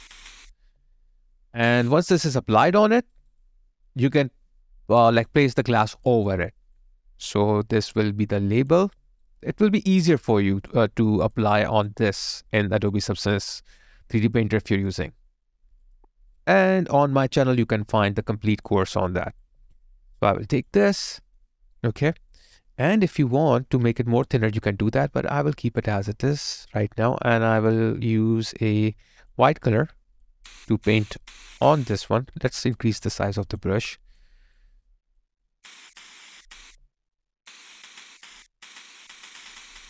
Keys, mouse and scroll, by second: 3.1 alt+right click, 8.9 alt+right click, 9.5 alt+middle click, 9.8 alt+right click, 10.1 alt+click, 11.7 alt+double click, 16.3 alt+right click, 16.7 alt+click, 18.9 alt+double click, 21.0 alt+middle click, 21.7 alt+right click, 23.0 alt+click, 24.4 alt+right click, 32.6 alt+click.